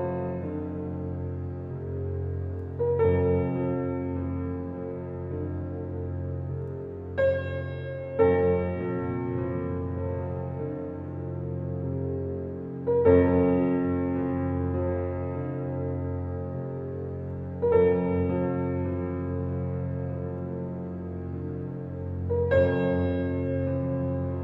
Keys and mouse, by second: 0.4 click, 1.0 click, 1.7 click, 2.2 click, 2.7 click, 4.7 ctrl+z, 5.4 ctrl+z, 5.7 ctrl+z, 6.1 ctrl+z, 6.5 ctrl+z, 6.9 ctrl+z, 10.3 click, 11.2 click, 12.6 ctrl+z, 13.9 f, 14.3 click, 15.1 click, 16.3 ctrl+z, 18.0 alt+click, 20.4 click, 21.2 click, 22.5 ctrl+click, 22.7 ctrl+z.